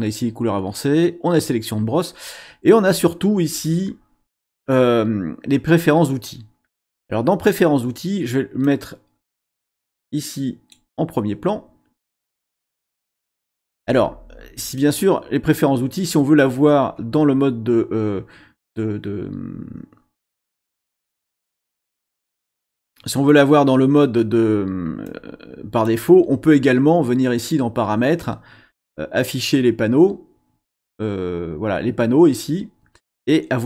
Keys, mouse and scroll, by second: 8.6-10.9 drag, 14.7-16.2 drag, 20.7-23.3 drag, 25.1 click.